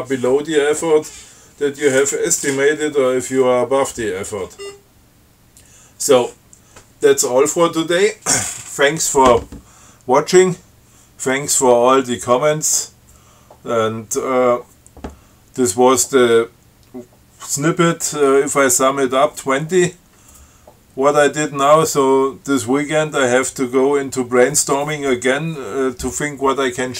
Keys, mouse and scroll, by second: 4.8 scroll up 2.